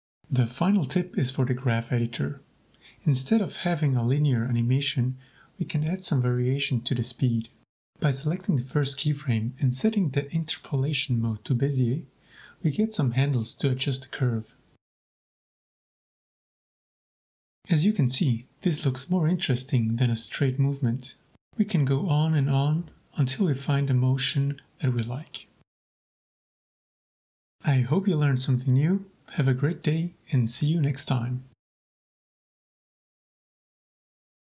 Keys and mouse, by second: 3.3 shift+space, 7.0 Escape, 10.2 t, 12.7 drag, 13.0-13.7 drag, 13.7 g, 15.3-15.6 drag, 15.7 shift+space, 19.0 Escape, 19.4 click, 20.1 click, 20.6 g, 22.2-22.7 drag, 22.8 drag, 23.2 shift+space, 26.6 Escape, 27.3 g.